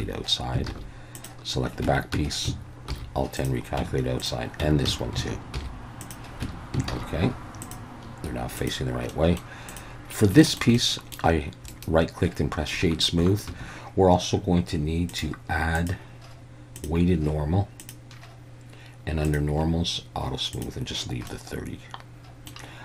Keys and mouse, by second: 0.7 alt+a, 1.2 click, 1.8 Tab, 2.1 a, 2.9 alt+n, 3.8 Tab, 4.2-4.6 drag, 4.6 Tab, 4.9 a, 5.6 alt+n, 6.4 Tab, 6.9 alt+a, 8.0-8.8 drag, 9.1-9.4 middle drag, 9.7 drag, 10.4 shift+middle drag, 10.8 middle click, 11.7 right click, 15.1 drag, 15.8-16.8 drag, 17.8 drag, 19.3 drag, 20.5 click, 21.3-22.5 middle drag.